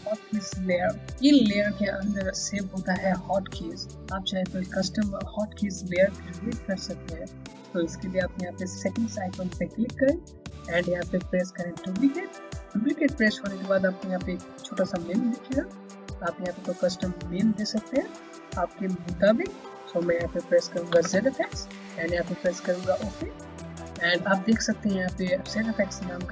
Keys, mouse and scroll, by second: 8.7 click, 11.8 click, 14.7 click, 20.5-21.5 typing, 23.0 click.